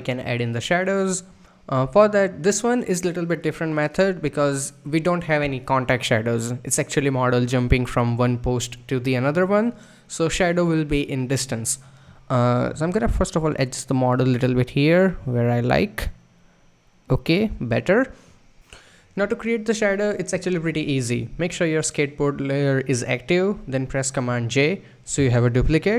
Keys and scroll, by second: 24.2 super+j.